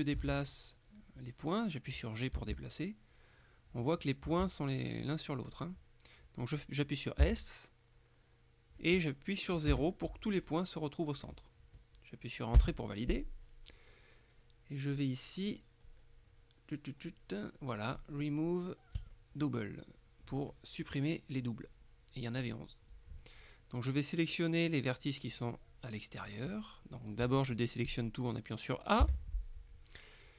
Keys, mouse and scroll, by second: 0.3 Escape, 2.4 g, 4.3 Escape, 7.3 s, 9.8 KP_0, 12.7 KP_Enter, 19.1 click, 29.1 a.